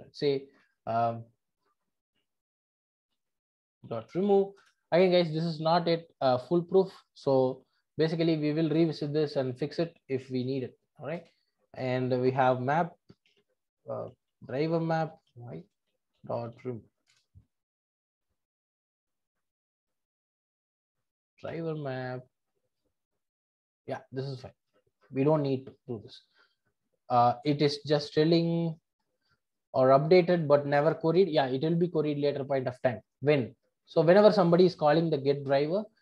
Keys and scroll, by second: 0.5 super+c, 3.1 super+v, 5.1 Return, 7.4 super+c, 9.3 super+c, 11.1 super+v, 15.6 Return, 25.3 super+BackSpace.